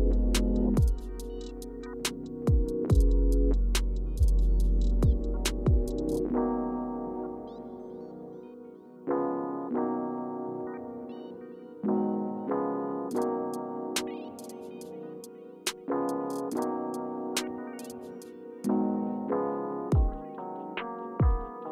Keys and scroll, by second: 3.8 Return, 10.1 super+y, 11.1 super+y, 12.8 k.